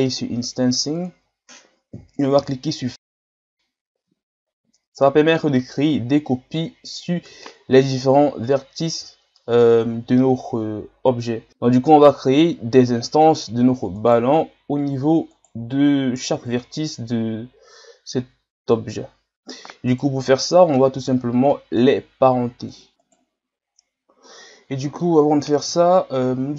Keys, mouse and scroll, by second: 1.2 scroll down 4, 3.1 click, 11.5-12.6 shift+scroll up 3, 12.6 scroll down 2, 13.0-14.0 middle drag, 14.0 right click, 15.4 right click, 19.9 right click, 20.5 middle click, 21.0-21.5 shift+scroll up 2, 21.5 middle click, 22.3-22.7 scroll up 1, 22.7-23.0 middle drag, 23.0 right click, 23.7-24.2 scroll up 1, 24.2-25.7 middle drag, 25.7 KP_1.